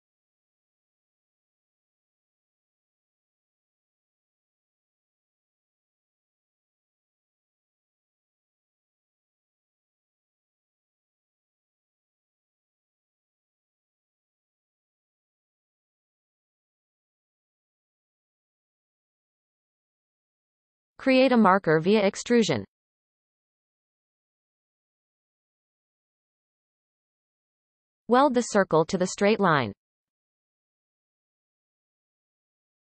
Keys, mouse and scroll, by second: 0.8 click, 2.0 g, 4.5-5.1 scroll up 3, 5.1-6.0 shift+middle drag, 6.0-6.4 scroll up 2, 6.9-7.4 shift+middle drag, 7.4-8.6 scroll up 2, 8.6 g, 12.3 g, 14.9 shift+click, 15.8 m, 17.1-18.2 scroll down 11, 18.7-19.3 scroll down 5, 22.5 e, 25.5-26.1 scroll down 5, 26.4 shift+middle click, 27.4 click, 28.1-29.4 scroll down 1, 29.4-30.7 shift+drag, 30.7 right click, 31.1 scroll up 2, 31.6 shift+middle click, 32.0 click, 32.6 g.